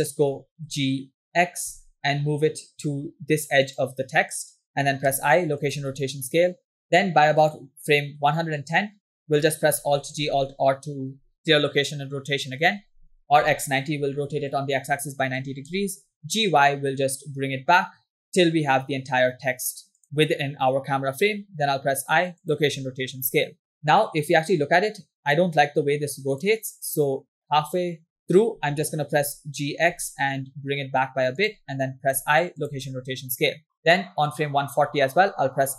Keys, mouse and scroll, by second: 0.8 g, 5.1 i, 8.0-8.4 drag, 9.9 alt+g, 10.3 alt+r, 15.5 g, 21.2 i, 23.9-27.4 drag, 28.1 click, 29.5 g, 32.8 i, 34.9 drag.